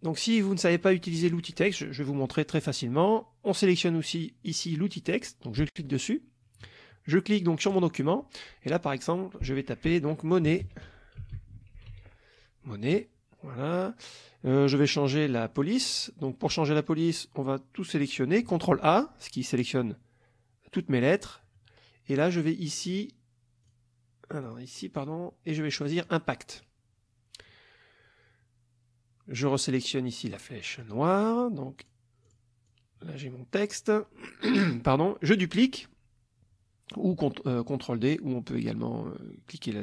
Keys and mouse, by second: 0.1 click, 0.4 middle click, 5.7 click, 7.7 click, 10.5-12.5 typing, 18.8 ctrl+a, 22.9 click, 23.7 click, 24.5 click, 26.1 click, 30.8 click, 31.8 click, 32.3 click, 32.7-33.9 drag.